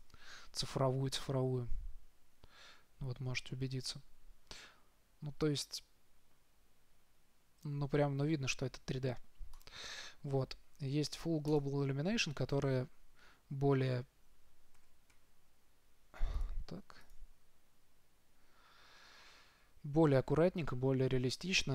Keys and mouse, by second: 1.9 middle click, 3.7-8.6 middle drag, 10.0-11.9 drag, 15.1 z, 15.5 z, 16.6-17.6 drag.